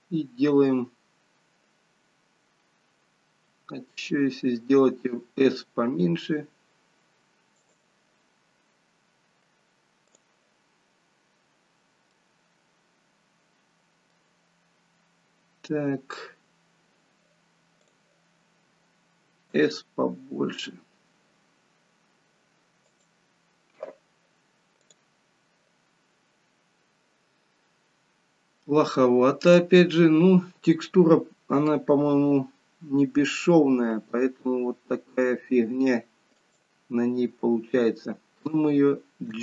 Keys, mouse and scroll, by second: 10.4 click, 12.3 middle click, 25.2 click.